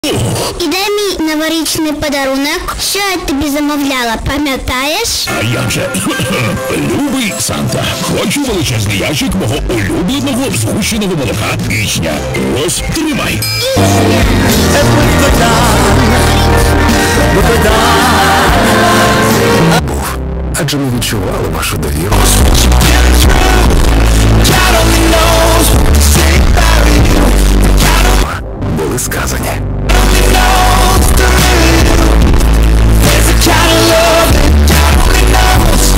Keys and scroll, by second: 0.0 ctrl+q, 3.4 c, 4.9 Up, 5.1 Up, 6.0 Up, 6.1 Return, 20.4 Page_Down, 28.6 Page_Down.